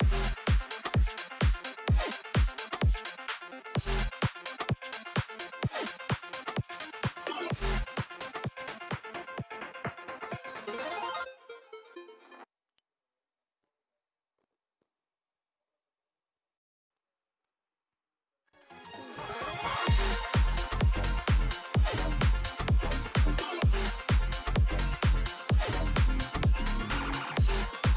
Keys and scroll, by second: 16.1 5, 16.4 Return.